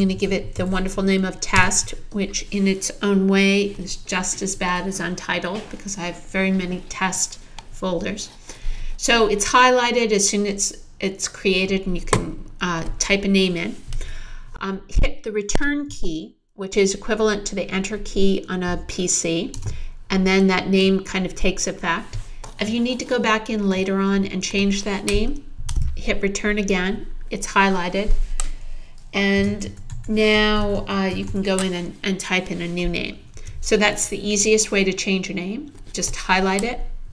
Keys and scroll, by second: 0.0-1.1 typing, 2.6 t, 19.6 Return, 25.7 Return, 29.4-31.8 typing, 33.3 Return.